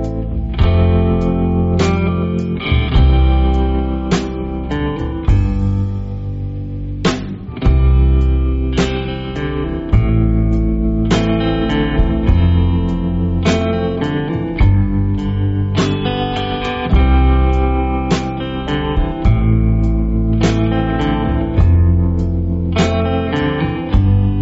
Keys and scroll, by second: 0.5 space, 1.0 alt+super+space, 1.1 alt+super+space, 1.3 alt+super+space, 2.0 alt+super+space, 2.7 space, 3.2 space, 3.7 super+space, 4.4 super+space, 4.9-5.5 super+space, 6.7 space, 7.2 super+space, 7.8 super+space, 8.1 super+space, 8.6 super+space, 10.2 space, 10.7 alt+super+space, 10.8 alt+super+space, 11.5 super+space, 13.4 space, 13.9-14.4 super+space, 15.4 `, 16.8 Tab, 21.0 super+z, 22.4 p.